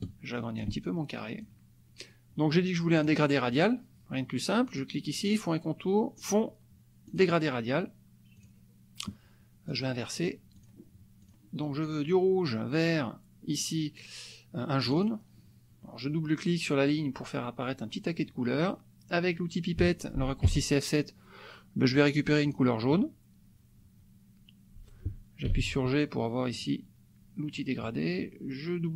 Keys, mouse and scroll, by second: 0.0-1.6 ctrl+drag, 2.9 click, 3.7 click, 4.8 click, 6.2 click, 7.0 click, 8.3 click, 9.7 click, 10.5 click, 11.3 click, 14.9 click, 20.5 F7, 22.5 click, 25.6 g, 26.5 click.